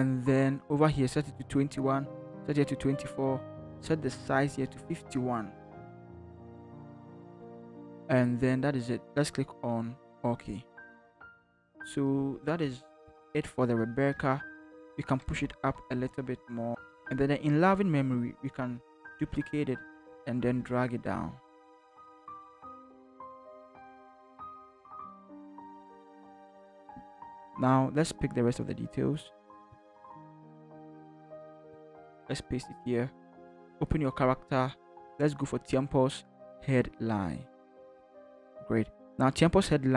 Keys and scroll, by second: 5.9 5, 6.3 1, 13.0 ctrl+0, 14.1 ctrl+0, 14.5 ctrl+t, 15.3 Up, 15.6 Up, 15.7 Up, 16.1 Up, 16.8 Down, 19.0 ctrl+j, 30.0 ctrl+c, 32.0 ctrl+v.